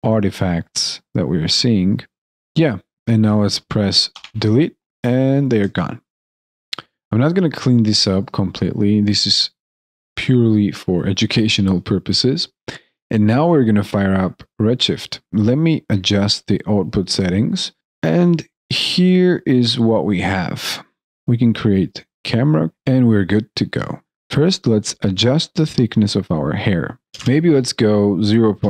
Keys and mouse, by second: 0.1 shift+click, 0.2 alt+right click, 0.3 shift+click, 0.4 alt+middle click, 0.5 alt+right click, 0.8 alt+middle click, 0.8 alt+click, 1.0 shift+click, 1.0 alt+middle click, 1.1 alt+right click, 1.2 alt+click, 1.6 alt+click, 1.8 shift+click, 2.0 alt+middle click, 2.0 alt+click, 5.4 alt+click, 6.1 alt+right click, 6.8 alt+middle click, 7.2 alt+click, 7.8 alt+middle click, 8.1 alt+click, 8.7 alt+middle click, 9.0 alt+click, 9.6 alt+right click, 10.4 alt+click, 10.8 alt+middle click, 11.1 alt+right click, 12.0 alt+click, 12.0 alt+middle click, 12.3 alt+click, 12.7 alt+middle click, 13.2 alt+click, 17.8 alt+right click, 18.8 alt+middle click, 23.8 alt+right click, 24.0 ctrl+z, 25.2 ctrl+z, 25.3 ctrl+a.